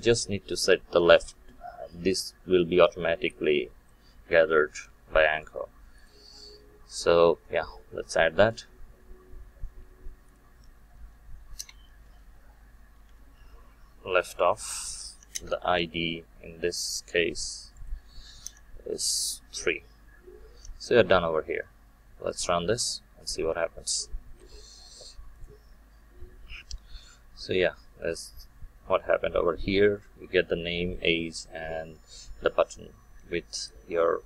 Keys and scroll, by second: 15.3 Return, 22.3 shift+F9.